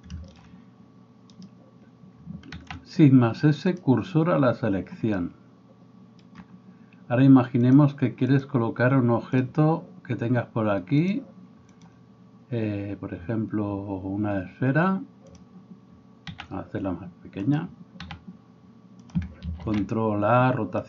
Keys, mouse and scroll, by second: 0.3 shift+click, 0.4 middle click, 1.3 click, 2.2-7.7 shift+middle drag, 2.6 shift+s, 7.7-9.4 drag, 9.4-11.0 middle drag, 11.0-17.6 drag, 16.4 s, 17.6-20.8 middle drag, 18.1 s, 19.6 ctrl+a.